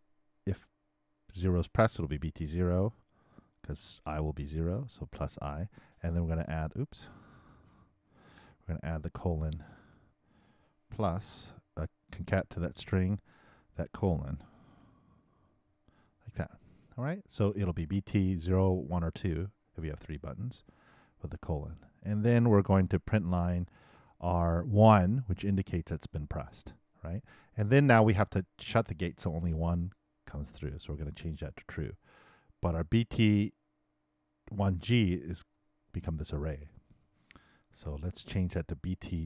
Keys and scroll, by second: 11.1 shift+=, 11.3 shift+space, 14.8 shift+', 15.4 shift+;, 15.7 shift+', 37.4 super+c, 38.5 super+v.